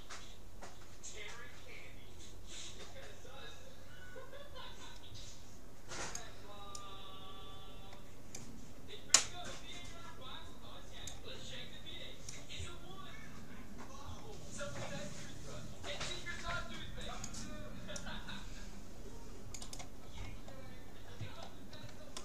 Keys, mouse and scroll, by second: 20.2-22.2 middle drag.